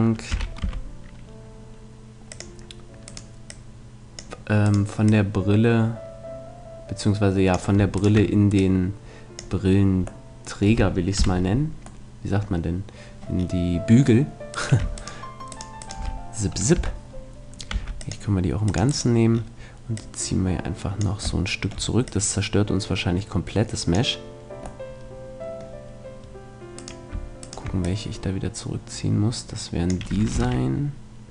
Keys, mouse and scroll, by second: 0.3 s, 2.4-6.8 drag, 3.0-6.3 right drag, 8.0-9.8 right drag, 8.6-9.8 drag, 11.2 KP_Decimal, 14.4-16.8 middle drag, 16.8 KP_3, 17.7 c, 19.0-20.8 right drag, 20.0-21.8 drag, 21.5-23.6 middle drag, 22.0-23.9 drag, 24.8-26.8 middle drag, 26.8-29.0 right drag, 27.8-29.6 drag, 30.4 ctrl+r.